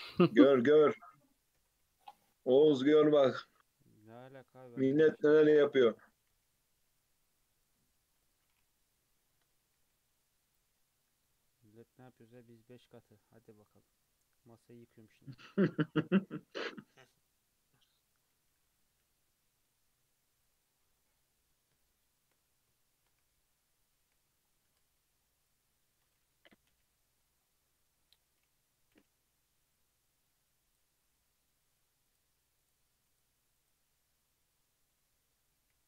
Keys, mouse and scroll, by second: 0.0 Tab, 0.7 3, 1.6 l, 1.8 p, 2.3 Tab, 2.6 alt+z, 2.9 click, 3.3 click, 4.4 Tab, 4.9 3, 5.5 a, 5.9 middle click, 6.1 g, 8.9 KP_3, 9.2 scroll up 2, 9.8 z, 12.1-15.2 drag, 15.4 Tab, 15.6 alt+z, 16.1-17.0 scroll up 2, 17.0 ctrl+r, 18.4 1, 18.6 click, 18.9 g, 21.0-23.2 shift+middle drag, 23.2 alt+z, 24.1 alt+z, 24.4 scroll down 2, 24.7 Tab, 25.2-26.7 scroll down 2, 26.7 /, 27.2 scroll down 2, 27.4-28.0 scroll up 1, 28.0-28.9 scroll down 2, 28.9 /, 30.2 click, 30.7 click, 32.1 click, 32.6 click, 33.1 click, 33.6 click, 35.7 /.